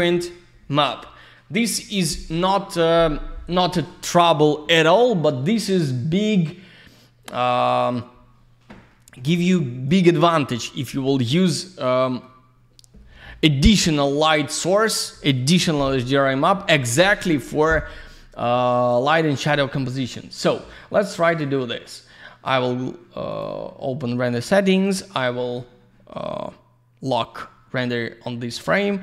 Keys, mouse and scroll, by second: 5.0 alt+middle click, 7.2 click, 8.9 alt+middle click, 9.2 alt+z, 9.4 click, 9.9 F3, 11.4 alt+middle click, 14.6 alt+middle click, 19.7 middle click, 19.9 middle click, 21.2 click, 21.4 click, 23.3 click, 23.4 click, 24.7 click, 24.8 click.